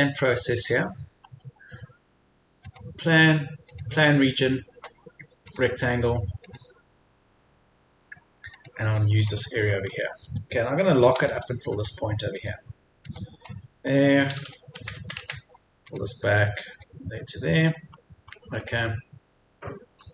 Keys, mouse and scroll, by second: 2.6-7.4 drag, 9.2-9.6 scroll up 1, 9.9 Escape, 10.5-11.0 scroll up 1, 11.7 click, 13.4 scroll down 1, 13.6 Escape, 14.4 click, 14.8 Left, 15.0 Left, 15.4 typing, 15.8 click, 17.9 middle click, 19.2-19.6 scroll down 1, 19.6 middle click.